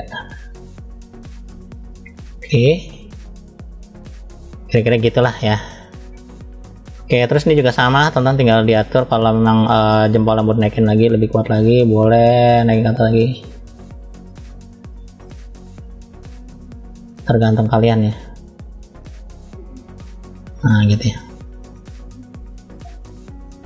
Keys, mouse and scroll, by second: 0.0 click, 0.7 click, 2.1 click, 2.7 click, 4.2-4.8 scroll down 3, 4.6 middle click, 6.0 scroll up 1, 6.7 shift+middle click, 6.7 scroll up 2, 7.7-8.7 middle drag, 9.5-9.9 scroll down 2, 10.2 middle click, 11.0 click, 14.9 click, 16.8 click, 16.9 click, 18.8 click, 19.9-20.3 scroll up 2, 20.6 middle click, 21.3 click, 22.3 shift+click.